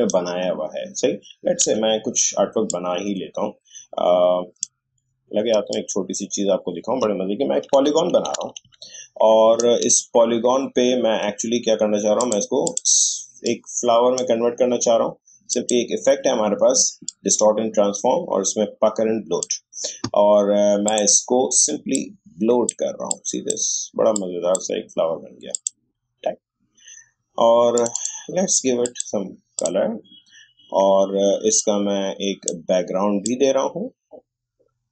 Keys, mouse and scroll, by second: 1.6 Delete, 2.7-5.7 drag, 7.7 Up, 12.1-34.9 drag.